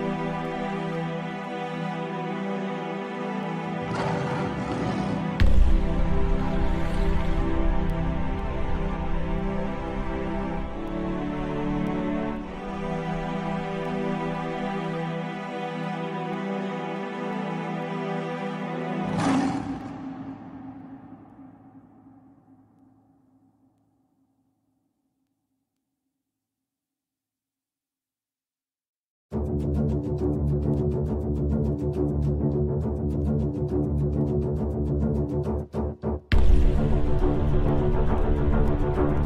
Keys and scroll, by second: 13.6 shift+F2, 25.2 F3, 26.3 ctrl+z.